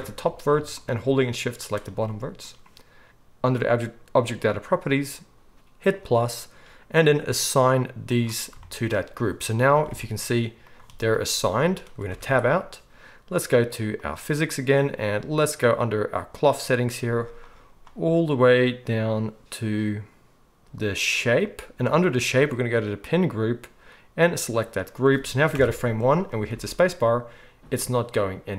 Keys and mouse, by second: 3.5-5.9 middle drag, 5.9-14.1 drag, 9.9 alt+a, 12.3 Tab, 14.1-21.2 middle drag, 21.2-28.5 drag, 25.5 shift+Left, 26.5 space.